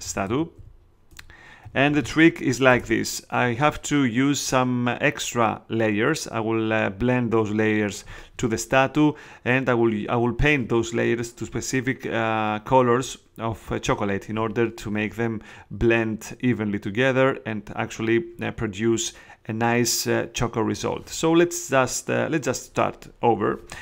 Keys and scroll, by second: 0.2-2.4 typing, 2.6 Return.